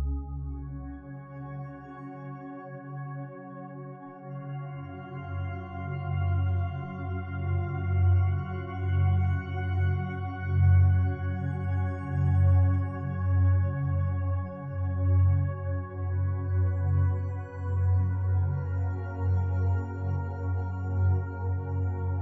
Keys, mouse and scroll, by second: 10.2 F9, 21.1 8, 21.4 Return.